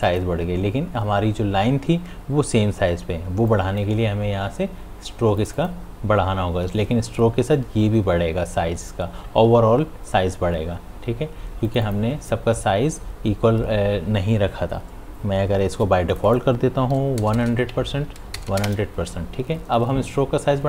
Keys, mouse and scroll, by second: 0.1 click, 3.5 click, 3.5 click, 11.7 click, 16.1 click, 17.7 Tab.